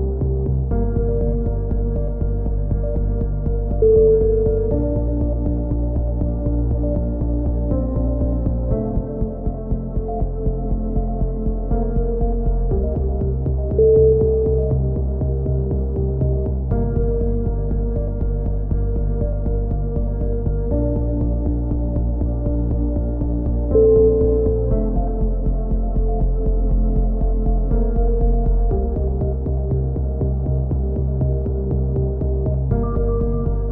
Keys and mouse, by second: 0.1 right click, 0.4 middle click, 0.6 right click, 0.8 click, 0.8 KP_3, 1.2 z, 1.7-3.2 middle drag, 3.2 click, 4.2 middle click, 4.8 click, 5.2 right click, 5.8 middle click, 6.6-8.1 drag, 9.4 a, 9.6 z, 10.0 Tab, 10.2 click, 12.0 KP_3, 12.4 click, 13.2 middle click, 13.2 z, 14.2 Tab, 15.0 click, 15.2 b, 16.7 e, 17.5-19.8 drag, 19.8 KP_7, 20.9 s, 25.1-26.6 middle drag, 26.6-27.7 drag, 27.2 right click, 27.8 KP_7, 28.0 click, 28.5 click, 31.0 s, 32.1 KP_3, 33.6 click.